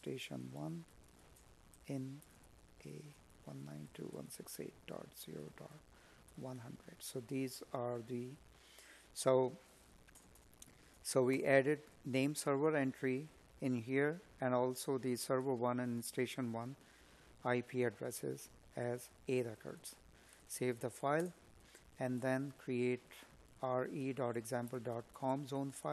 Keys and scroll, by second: 3.1 Escape, 6.6 Up, 18.7 space.